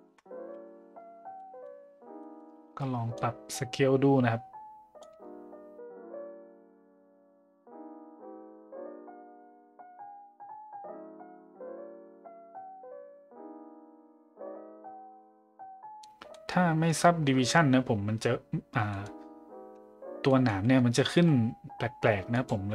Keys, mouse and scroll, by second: 1.4 middle drag, 2.2 middle click, 3.2-5.0 shift+drag, 5.8 middle click, 6.1 middle drag, 6.4 middle click, 6.6 middle click, 7.1 middle click, 7.4 click, 8.2-9.3 drag, 9.6 click, 10.5 middle click, 10.7 middle click, 11.0-12.3 shift+drag, 12.5 middle click, 12.7 middle click, 12.9 middle click, 13.5 click, 13.8 middle click, 14.9 click, 15.1 click, 15.4 middle drag, 15.7 middle click, 16.3 middle drag, 18.9 middle drag, 20.3 middle drag, 22.3 click.